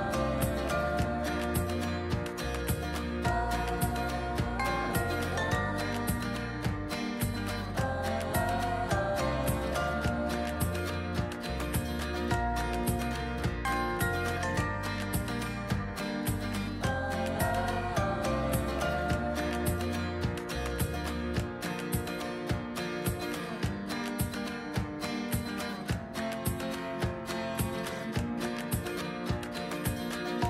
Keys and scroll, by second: 6.4 ctrl+z, 12.3 ctrl+z, 18.5 ctrl+z, 20.2 ctrl+z, 21.0 ctrl+z.